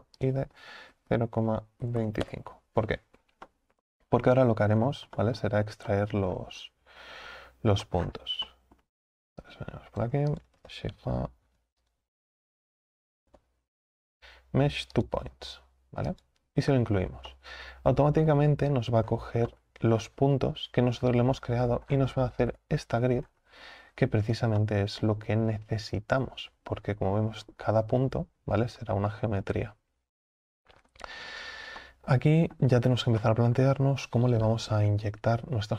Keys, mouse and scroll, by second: 3.5-4.7 middle drag, 4.7-5.2 scroll down 7, 5.2-5.7 middle drag, 5.7 scroll up 2, 5.9 middle click, 6.4 scroll down 1, 6.6-7.9 scroll up 6, 17.3-18.6 middle drag, 18.6-19.1 scroll up 3, 19.1-19.5 scroll down 4, 19.5-20.9 middle drag, 20.9-21.3 scroll down 3, 21.3-21.7 scroll up 4, 21.9 scroll down 5, 22.5 KP_7, 23.2 scroll up 2, 24.6-35.7 shift+middle drag.